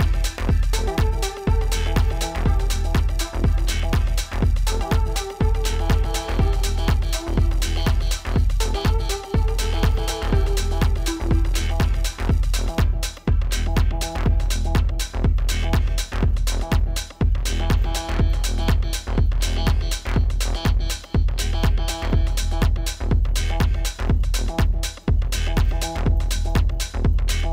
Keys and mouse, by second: 0.6 click, 4.1 click, 5.3 right click, 6.4 click, 10.1 BackSpace, 11.0 click, 12.8-15.2 typing, 17.2 typing, 19.6 typing, 22.2 click.